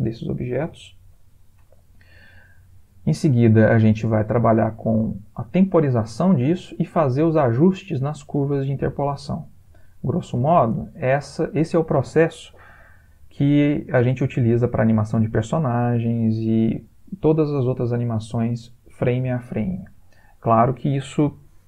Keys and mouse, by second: 1.9 click, 6.6 click, 10.6 space.